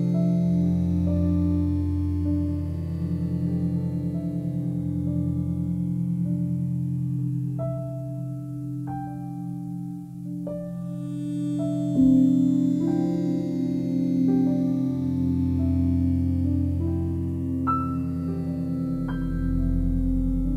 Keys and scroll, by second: 6.4 ctrl+z, 7.0 ctrl+z, 7.9 ctrl+z.